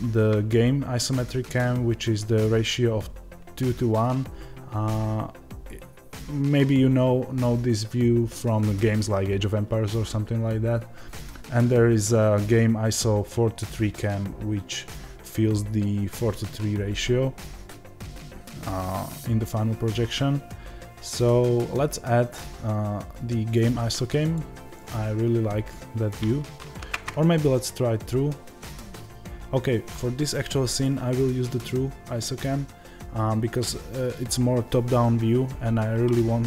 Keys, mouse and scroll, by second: 26.5 ctrl+z, 27.0-36.4 drag.